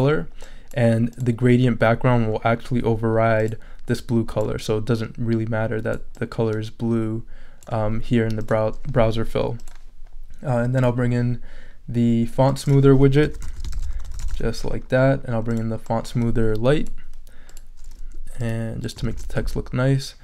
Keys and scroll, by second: 13.0-14.8 typing, 19.1 shift+super+e.